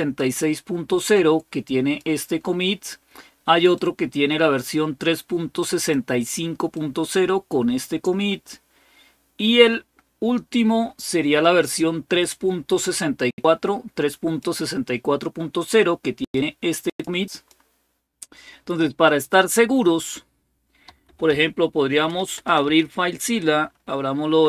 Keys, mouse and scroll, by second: 0.9 click, 3.5-5.7 drag, 5.8 click, 6.6-7.9 drag, 10.0-12.7 scroll down 3, 12.7-14.2 drag, 14.6 click, 16.0-17.1 drag, 17.2 click, 17.9 click, 18.8 click, 20.4-22.4 typing.